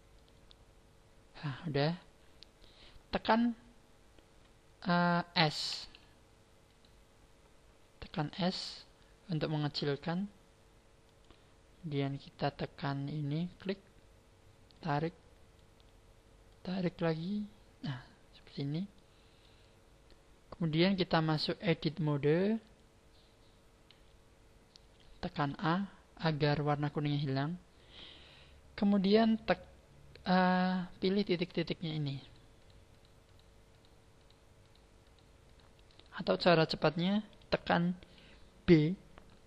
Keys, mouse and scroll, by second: 5.6 a, 6.6 right click, 8.5 s, 11.2 click, 13.5 click, 14.7 click, 16.5 click, 18.4 scroll up 4, 18.9 middle click, 19.7-20.1 scroll up 2, 21.7 click, 22.7 click, 23.9 a, 24.9 a, 25.5 a, 30.4-31.8 scroll up 11, 31.8 shift+right click, 32.2 shift+right click, 32.6 shift+right click, 32.9 shift+right click, 33.2 shift+right click, 33.7 shift+right click, 34.1 shift+right click, 34.7 shift+right click, 35.0 shift+right click, 35.4 shift+right click, 35.9 shift+right click.